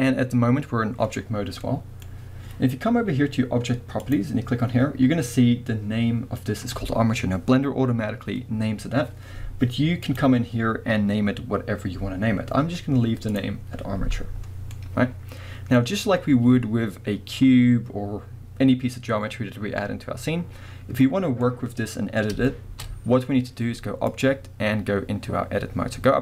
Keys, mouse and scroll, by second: 1.6 middle click, 4.0 click, 10.0-13.3 drag, 14.8-24.1 middle drag, 21.4 scroll up 2, 24.1-26.2 drag.